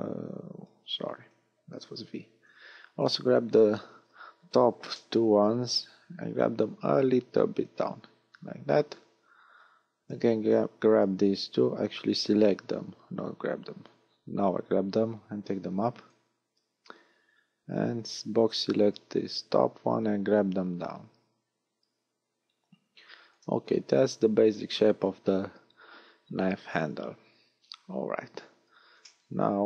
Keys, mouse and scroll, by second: 2.3 b, 5.5 click, 8.5 a, 10.3 b, 13.9 click, 16.6 a, 17.9 b, 20.1 click, 24.1 a, 29.1 middle click.